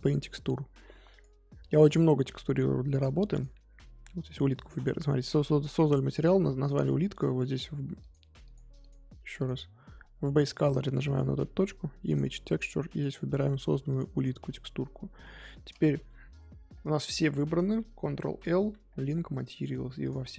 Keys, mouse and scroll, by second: 15.2-16.2 middle drag, 16.2 Tab, 19.6 ctrl+l, 20.1 click.